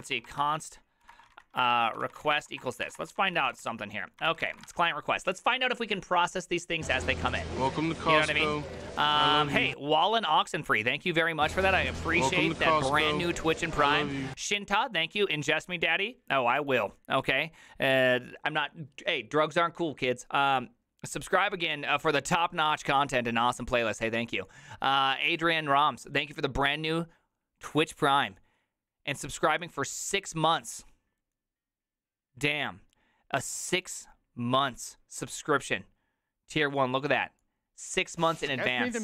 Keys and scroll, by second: 0.0-4.9 typing.